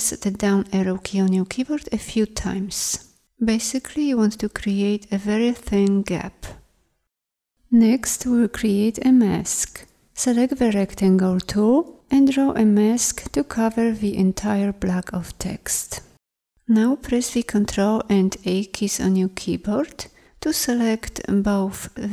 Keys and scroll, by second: 10.0 m.